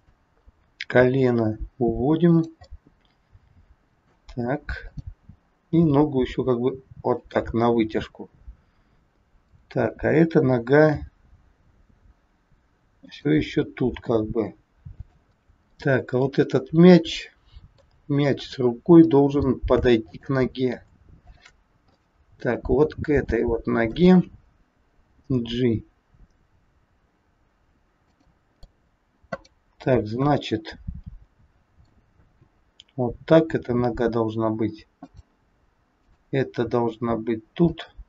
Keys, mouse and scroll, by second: 0.9 g, 2.8 middle click, 4.9 click, 5.8 g, 8.1 click, 9.3 click, 10.8 g, 15.7 middle click, 18.4 middle click, 18.4-18.8 scroll up 3, 19.1 shift+middle click, 19.2 shift+middle click, 20.0 click, 21.2 shift+click, 21.8 middle click, 22.8-23.2 scroll down 3, 23.4 shift+middle click, 25.1 g, 28.6 middle click, 29.3 click, 30.3 middle click, 32.2 g, 36.0 click, 36.5 g.